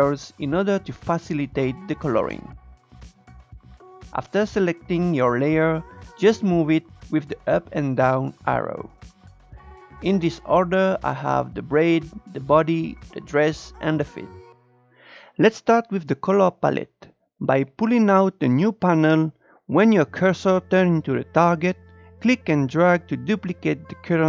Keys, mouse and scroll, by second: 3.4-8.1 drag, 9.1 click, 21.5-24.2 drag.